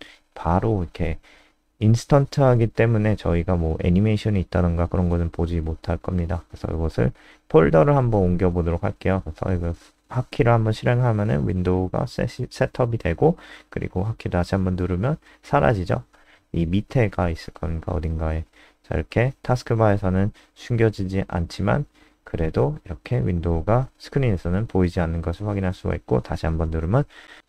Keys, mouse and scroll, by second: 0.2-0.9 scroll down 1, 2.9 scroll up 2, 3.1 scroll down 1, 3.7 click, 4.3 ctrl+s, 4.6 F5, 5.6 F3, 7.0 click, 8.7 KP_0, 22.6 click, 23.8 KP_0.